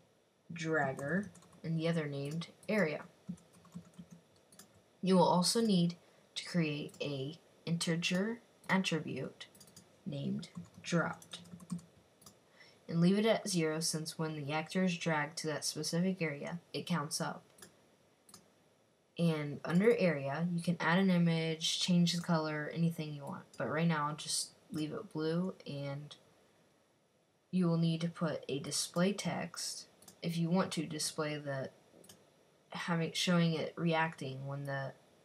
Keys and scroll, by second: 0.0-1.8 typing, 3.1-4.5 typing, 10.2-12.1 typing, 14.0-14.5 typing.